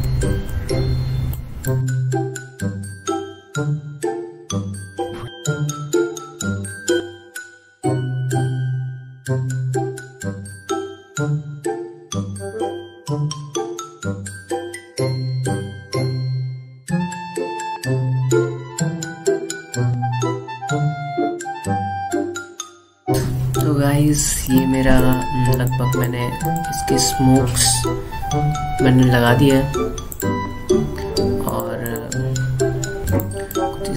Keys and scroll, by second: 0.5 ctrl+t, 1.4 ctrl+shift+t, 2.9 space, 9.7 alt+space, 10.1 ctrl+z, 10.4 ctrl+z, 10.9 space, 11.3 ctrl+z, 11.7 ctrl+m, 13.4 ctrl+z, 16.0 ctrl+z, 16.9 ctrl+z, 17.6 space, 18.6 space, 18.9 space, 19.4 ctrl+z, 19.9 ctrl+z, 20.3 ctrl+z, 20.6 ctrl+z, 20.8 ctrl+z, 21.2 ctrl+z, 21.4 space, 21.8 ctrl+z, 22.1 ctrl+z, 22.8 Delete.